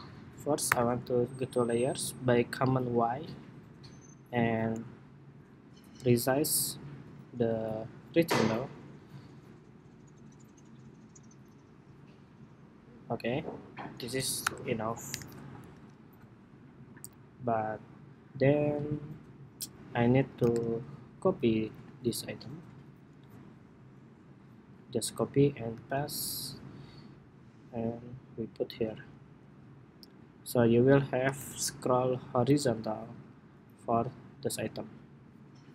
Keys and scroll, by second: 0.4 super+y, 14.2 super+-, 14.8 super+-, 15.3 super+=, 16.0 super+=, 20.8 super+-, 24.9 super+c, 25.4 super+v, 31.1 super+=.